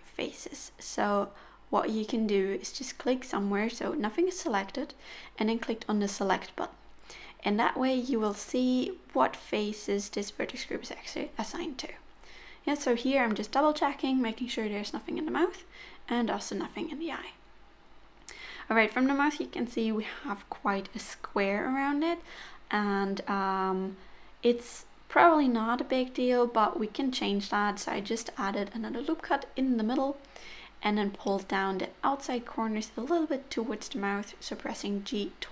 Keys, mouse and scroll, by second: 0.4-1.5 scroll down 4, 1.9 click, 3.4 click, 5.3 click, 5.9 middle click, 8.6 click, 8.9-9.5 scroll up 7, 9.7 middle click, 11.1 click, 11.6 middle click, 14.5-14.9 scroll down 3, 14.9 middle click, 18.3-18.8 scroll up 2, 20.6-21.2 scroll down 4, 20.9 middle click, 22.3-22.8 scroll up 6, 23.7 1, 24.4 click, 26.5 ctrl+r, 30.2 click, 31.1 g, 32.9 click, 33.2 g.